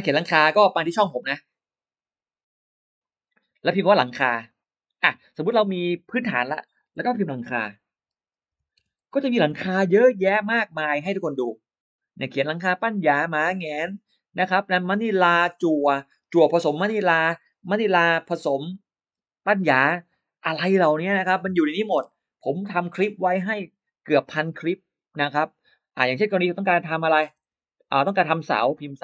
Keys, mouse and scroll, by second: 0.9 middle click, 2.3 click, 4.3 click, 7.3-10.0 typing, 10.9 middle click, 10.9-11.2 scroll down 1, 11.8 middle click, 26.8-29.0 typing.